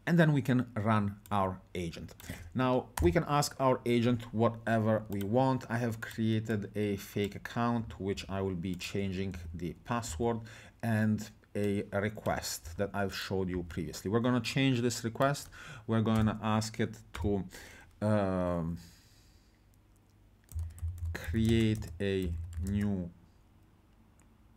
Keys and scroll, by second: 3.0 BackSpace, 8.2 ctrl+c, 9.4 ctrl+v, 10.1 alt+Tab, 12.7 ctrl+c, 13.5 ctrl+v, 16.1 BackSpace, 17.1 Caps_Lock, 20.3-23.0 typing.